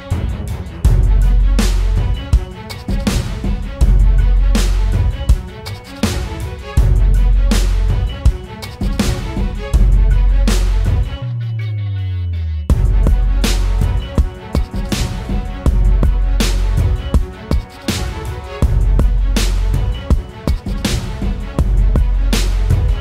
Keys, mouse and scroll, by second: 3.8-4.3 typing.